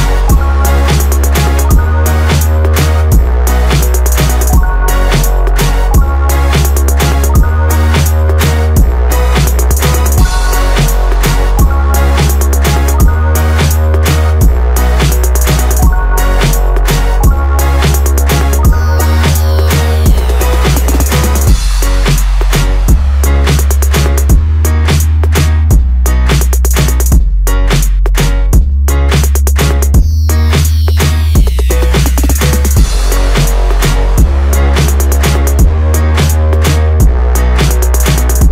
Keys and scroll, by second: 1.7 Up, 3.3 Return.